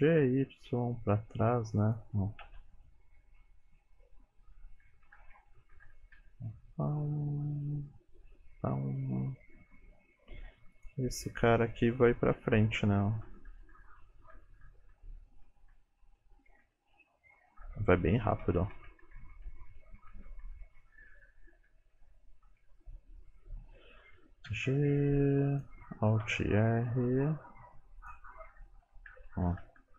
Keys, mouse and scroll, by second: 2.6-4.6 Left, 4.9 Left, 4.9 Right, 5.1 Right, 5.8 Right, 6.2 Right, 6.4 space, 9.3 space, 10.8 click, 12.6 Left, 12.9 Left, 13.1 Left, 13.3 Left, 13.5 Left, 13.8 Left, 14.0 Left, 14.4 Left, 14.7 Left, 15.0 Left, 15.2 Left, 15.5 Left, 15.8 Left, 16.1 Left, 16.4 Left, 16.7 Left, 17.0 Left, 17.7 Left, 18.1 Left, 18.5 Right, 18.8 Right, 19.1 Right, 19.4 Right, 19.7 Right, 20.0 Right, 20.3 Right, 20.7 Right, 21.2 Right, 21.6 Right, 22.0 Right, 22.5 Right, 24.5 g, 26.2 alt+r, 26.7 g, 29.1 Left, 29.3 Left, 29.5 Left, 29.7 Left, 29.9 Left.